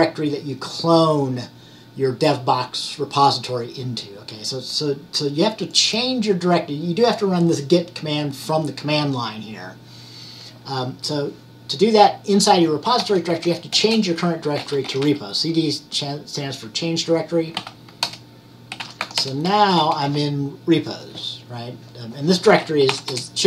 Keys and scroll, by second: 12.9-15.6 typing, 17.7-19.6 typing, 22.8-23.4 typing.